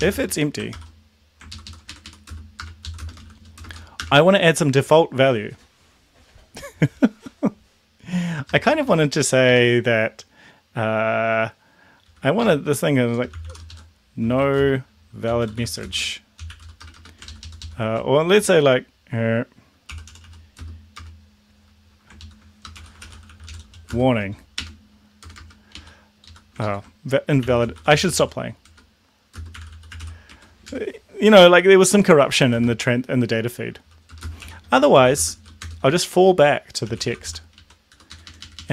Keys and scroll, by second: 0.0-0.5 typing, 0.7 ctrl+v, 1.5 ctrl+shift+Left, 1.9 Right, 2.0 Right, 2.2-3.9 typing, 2.8 Left, 3.7 Return, 4.8 Tab, 8.7 shift+', 12.4 Left, 12.7 Right, 13.1-17.1 typing, 17.3 ctrl+shift+Left, 19.7-20.9 typing, 22.2 ctrl+shift+Left, 22.6-25.2 typing, 25.7 Right, 26.2 Left, 27.2-30.5 typing, 30.6 Down, 32.6 space, 34.1-37.7 typing, 37.9 Down, 38.1 Up, 38.3 Up, 38.4 Up, 38.6 Up.